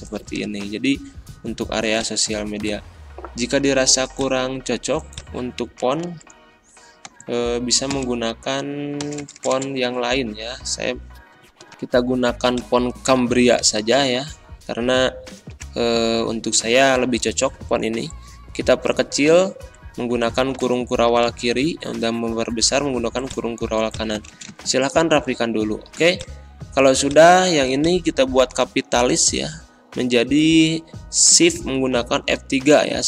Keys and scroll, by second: 2.5 ctrl+a, 5.7-7.9 typing, 9.0 BackSpace, 20.2 ctrl+[, 20.6 ctrl+[, 21.1 ctrl+], 24.2 space, 32.1 shift+F3.